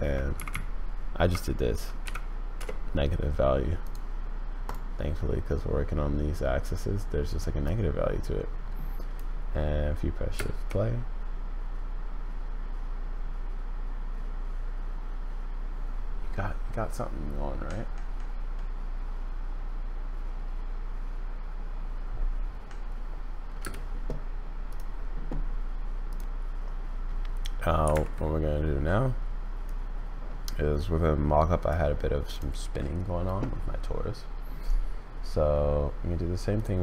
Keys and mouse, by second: 0.5 Left, 7.6-9.2 drag, 10.3 space, 23.6 space, 29.6-31.7 drag, 36.5 click.